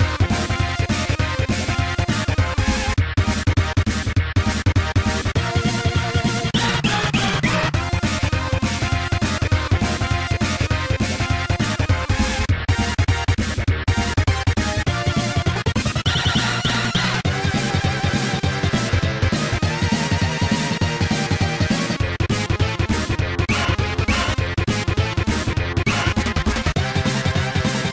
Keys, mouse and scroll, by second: 0.7 click, 0.8 click, 1.0 s, 1.7-2.1 scroll up 2, 3.7 click, 4.1 ctrl+r, 4.4-4.9 scroll up 2, 5.2 scroll down 1, 5.5 click, 5.6 click, 5.7 click, 5.8 double click, 6.8 click, 6.9 click, 7.4 right click, 7.5 right click, 8.5-9.5 typing, 10.1-10.6 scroll down 2, 10.7 middle click, 11.6 scroll up 2, 12.4 Tab, 12.8 click, 12.9 click, 14.3-14.9 typing, 16.0 0, 18.8 Tab, 19.1 click, 20.0 g, 20.3 z, 21.4 scroll down 2, 23.4 click, 23.7 ctrl+z, 24.2 click, 24.4 click, 24.8 click, 25.1 g, 25.4 z, 26.4-27.0 scroll down 2.